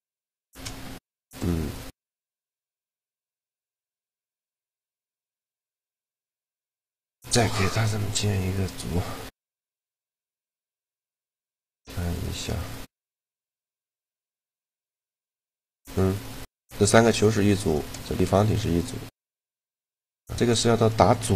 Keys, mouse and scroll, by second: 0.3 shift+g, 1.3 middle click, 1.9 right click, 3.0 shift+d, 3.9 shift+d, 4.5-6.4 drag, 6.9 ctrl+g, 13.5-15.1 right drag, 13.9 shift+g, 15.1 click, 16.3 g, 17.4-19.0 drag, 17.9 shift+g, 19.4 click, 19.4 shift+g, 20.6 click, 20.9 shift+g.